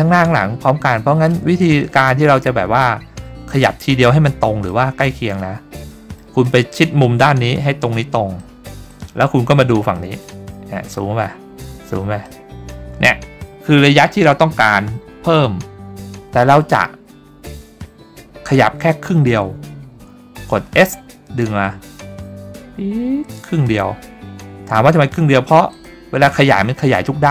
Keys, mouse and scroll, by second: 1.8 scroll up 1, 3.9-4.4 scroll up 2, 4.8 middle click, 6.0 middle click, 6.6 middle click, 8.5 middle click, 9.0 middle click, 10.1 middle click, 11.0 ctrl+scroll up 1, 11.7-12.3 scroll up 3, 12.4 middle click, 20.8 s, 25.9 click, 26.8 scroll down 2.